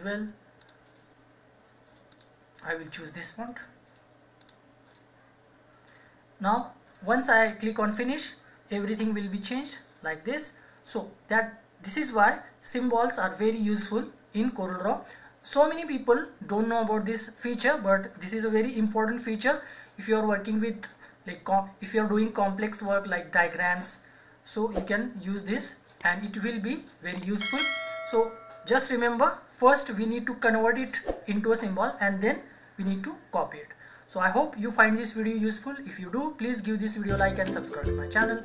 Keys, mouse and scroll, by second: 0.6 click, 7.9 click.